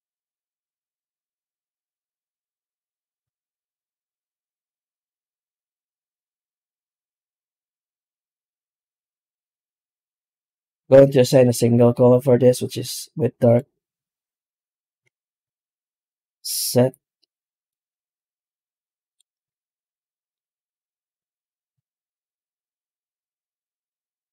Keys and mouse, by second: 0.5 z, 2.8 Tab, 3.2 alt+shift+z, 3.6 a, 4.8-5.1 middle drag, 5.1 Tab, 6.1 Tab, 6.5 right click, 6.9 Tab, 7.4 a, 8.4 ctrl+shift+x, 15.3 ctrl+shift+x, 19.3 alt+shift+z, 19.9 middle click, 20.4 Tab, 21.2 alt+h, 21.6 alt+a, 21.9 z.